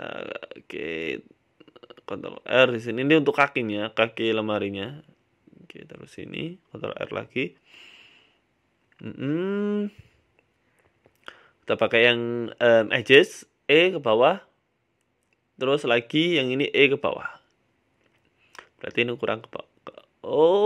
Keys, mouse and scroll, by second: 0.1 ctrl+r, 1.2 ctrl+r, 1.8 middle click, 2.2 ctrl+r, 6.3 ctrl+r, 8.0 middle click, 9.1 click, 10.2 click, 10.8 right click, 11.5 click, 12.2 right click, 12.6 shift+right click, 14.2 e, 16.0 right click, 16.3 shift+right click, 16.7 e, 18.6 Tab, 18.9 shift+middle click, 19.5 middle click, 19.8 Tab, 20.1 middle click, 20.4 scroll down 1.